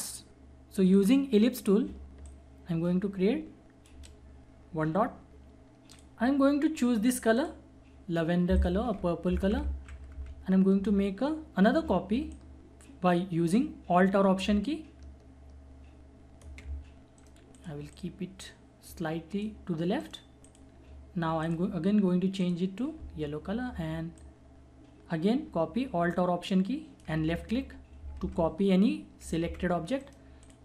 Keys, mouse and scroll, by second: 2.2-5.9 alt+shift+drag, 9.3 alt+Right, 10.1 alt+Down, 12.3-17.2 alt+drag, 17.1 right click, 17.5-20.0 drag, 18.2 click, 20.0 right click, 20.0 right click, 20.4 click, 24.2-28.0 alt+drag, 28.0 scroll up 1, 29.4 Down, 30.0 right click, 30.4 click.